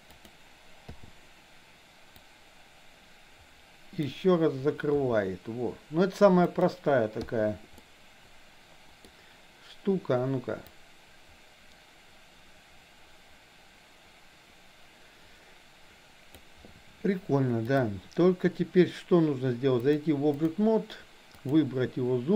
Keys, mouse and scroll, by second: 0.9 i, 2.2-4.2 drag, 4.9 r, 7.3 click, 7.8-9.1 middle drag, 10.7-16.4 drag, 17.7 click, 19.8-20.6 drag, 21.3 click.